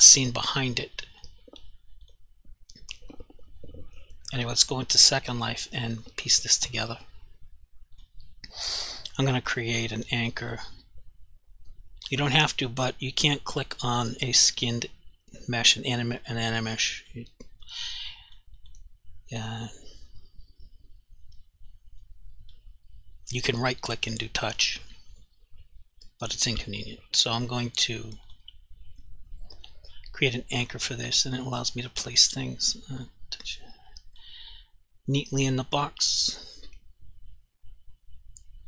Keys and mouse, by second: 1.1 click, 2.1 click, 8.0 click, 8.1 click, 17.3 alt+click, 18.3 alt+click, 18.7 alt+click, 22.2 click, 28.4 click, 32.4 click.